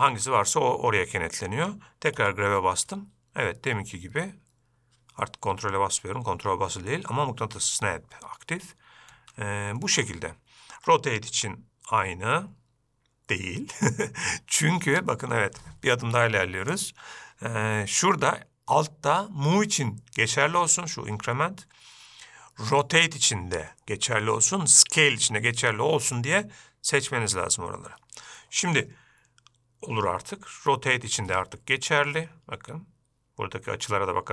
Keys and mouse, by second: 2.6 g, 11.7 r, 17.1-28.4 drag, 31.0 r.